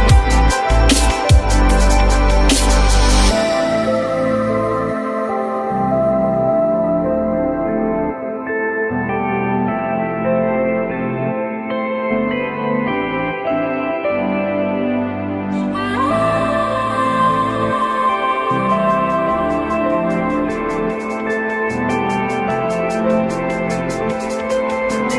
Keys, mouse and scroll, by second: 0.6 alt+middle click, 1.6 alt+middle click, 6.7 F3, 7.2 F3, 8.6 F3, 9.3 alt+middle click, 9.8 alt+middle click, 11.6-12.0 typing, 15.1 F4, 15.4 F3, 16.3 F3.